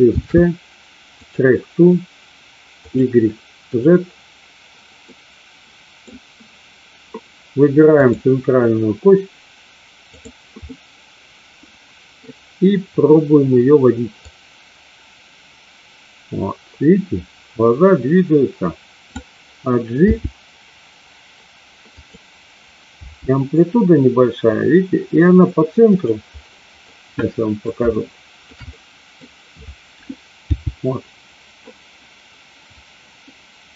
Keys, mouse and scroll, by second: 0.1 ctrl+shift+c, 2.8 click, 3.7 click, 5.1-6.1 middle drag, 10.7-12.2 middle drag, 14.3-19.2 drag, 20.1 g, 22.1 click, 23.1 g, 26.8 middle click, 27.9 shift+middle click, 28.7 middle click, 30.4 g.